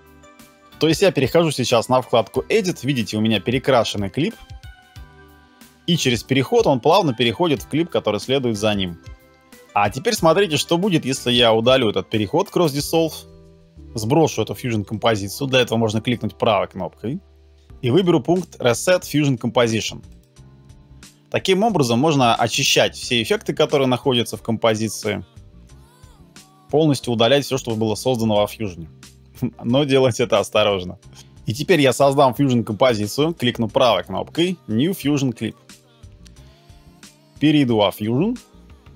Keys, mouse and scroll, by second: 0.6 space, 4.3 space, 12.7 BackSpace, 14.9 right click, 33.3 right click.